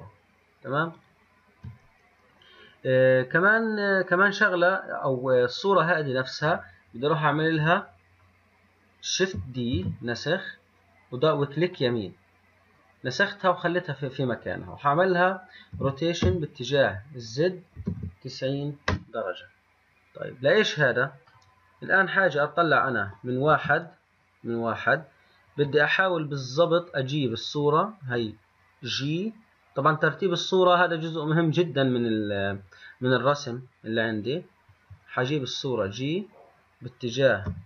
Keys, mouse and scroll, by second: 1.1 click, 6.6-7.8 middle drag, 7.8 scroll down 1, 9.9 shift+d, 15.9 r, 21.4-23.6 middle drag, 23.6 KP_1, 24.5-26.1 scroll up 5, 26.1 click, 34.8 g.